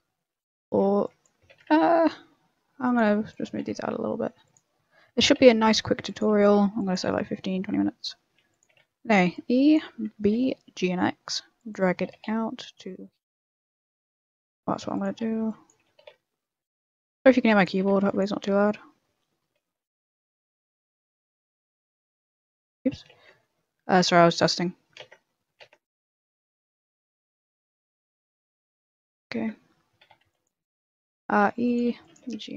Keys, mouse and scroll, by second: 0.0 shift+middle click, 0.6 a, 1.0 b, 1.4 g, 1.8-2.8 scroll up 1, 2.9 a, 3.2 b, 3.5 g, 5.1-9.2 typing, 5.2 scroll down 4, 5.5 shift+middle click, 6.4 shift+middle click, 7.1 shift+middle click, 10.2 g, 13.4 a, 13.5 b, 13.7 g, 15.1 a, 15.4 b, 15.8 g, 17.8 a, 18.0 b, 22.1 shift+f, 22.1 shift+g, 23.1 ctrl+z, 25.6 ctrl+z, 27.3 ctrl+shift+z, 27.6 ctrl+shift+z, 27.8 ctrl+shift+z, 28.1 ctrl+shift+z, 29.3 ctrl+z, 30.0 a, 30.2 b, 31.4-32.5 typing.